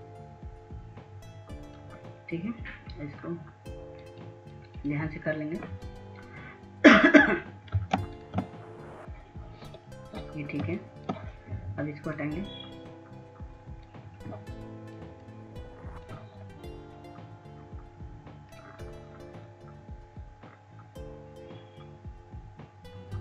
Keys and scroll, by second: 11.8 ctrl+space.